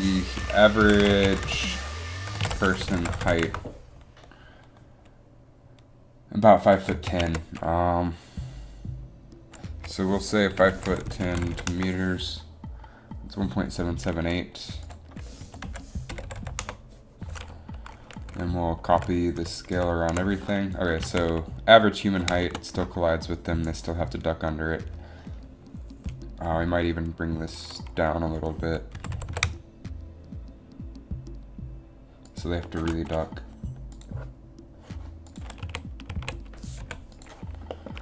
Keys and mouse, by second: 16.3 7, 16.7 7, 19.0 ctrl+c, 19.5 ctrl+v, 19.9 ctrl+v, 21.2 a, 29.0 r, 29.2 r, 35.8 a, 36.2 a, 36.9 i.